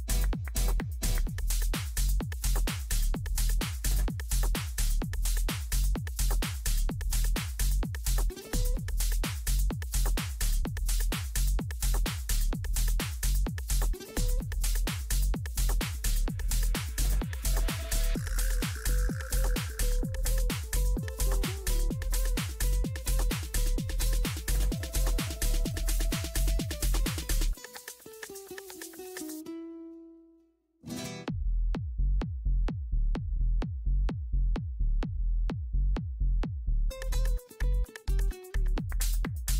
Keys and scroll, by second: 13.6 Up, 20.2 Up, 37.7 c.